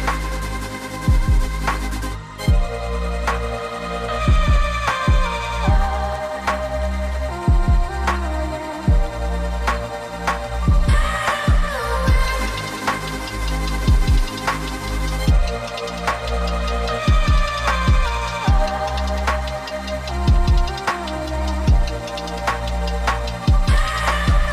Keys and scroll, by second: 22.0-22.8 typing, 23.5 Tab, 24.3-24.5 typing.